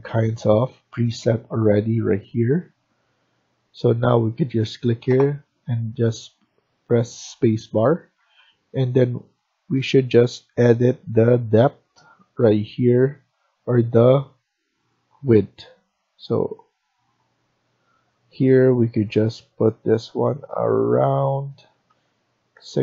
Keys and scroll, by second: 3.2 Escape, 7.8 Escape, 8.1 Escape, 21.8-22.5 typing.